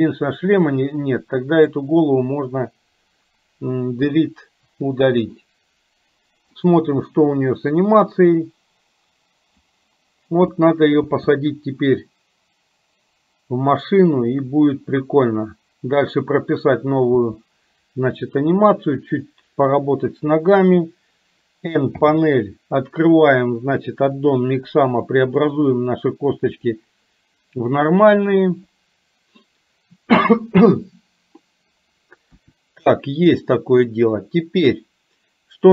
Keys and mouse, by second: 0.7-1.9 drag, 4.7 Delete, 5.4-6.6 middle drag, 8.2-9.9 drag, 10.6 middle click, 11.3 space, 17.3 space, 19.3 middle click, 20.6 click, 25.6-29.3 drag, 32.4 KP_1.